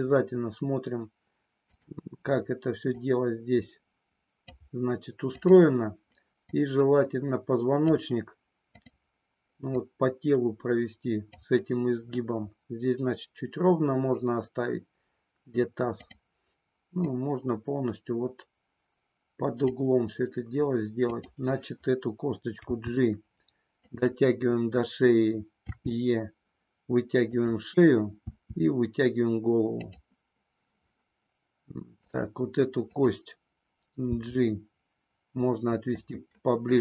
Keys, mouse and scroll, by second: 1.6 click, 3.1-4.6 drag, 5.4 click, 6.5-8.0 drag, 8.7 click, 9.6-11.4 drag, 17.0-19.6 drag, 21.0 click, 22.6 g, 23.9 click, 25.7 e, 28.3 e, 32.9 click, 34.0 g, 36.0 click.